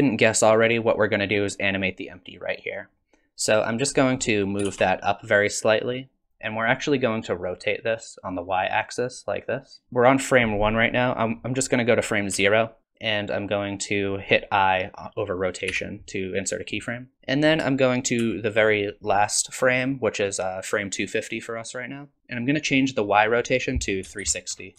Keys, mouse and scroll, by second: 4.6 g, 7.2 click, 12.3 Left, 15.7 i, 17.1 shift+Left, 18.2 shift+Right, 22.2 click, 23.1 click.